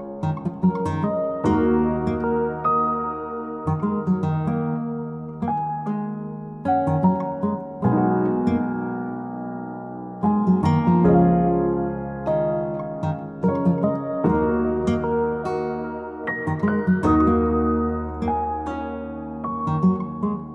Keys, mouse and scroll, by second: 0.7 click, 2.4 click, 2.9 click, 3.9 click, 5.1 click, 5.8 click, 6.5 click, 7.5 click, 7.7 click, 8.0 click, 8.8 r, 9.7 Escape, 10.2 click, 11.0 right click, 12.5 click, 12.8 Escape, 13.1 scroll down 5, 13.4 scroll up 1, 13.7-14.6 scroll down 15, 14.6-15.0 scroll up 1, 16.0 o, 17.2 click, 17.4-18.3 scroll up 4, 18.4-18.9 scroll down 1, 19.8 click.